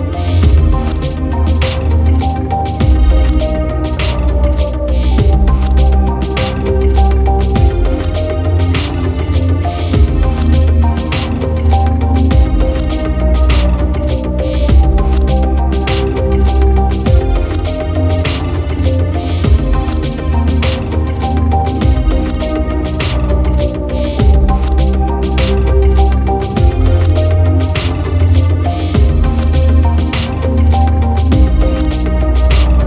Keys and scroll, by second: 1.8 ctrl+j, 2.0 ctrl+t, 25.7 ctrl+-, 27.3 ctrl+0, 28.1 ctrl+-, 28.7 ctrl+0, 32.6 ctrl+-.